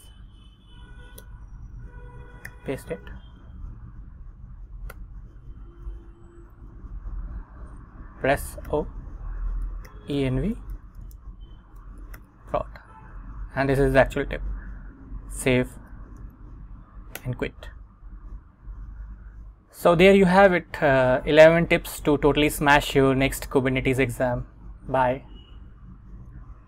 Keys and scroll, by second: 0.2 super+Tab, 1.3 Return, 2.6 super+v, 3.4 Up, 5.0 Return, 6.2 Down, 8.8-12.9 typing, 13.3 Escape, 15.9 shift+;, 16.3 x, 17.3 Return.